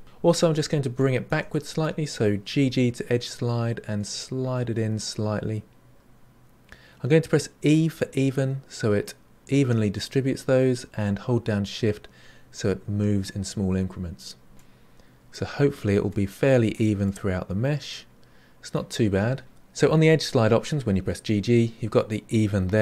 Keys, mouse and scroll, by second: 0.0-2.5 middle drag, 2.5 g, 14.5 middle click, 16.0 middle click, 16.2-19.4 middle drag.